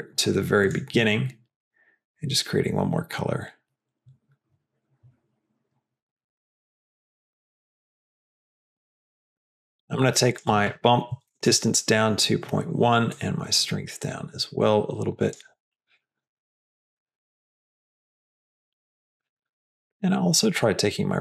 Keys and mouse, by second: 0.5 click, 9.4 click, 10.2-11.9 drag, 13.1-15.3 drag, 16.4 click, 16.7 g, 18.1 g, 19.6 middle click, 20.3-21.2 drag, 21.1 g.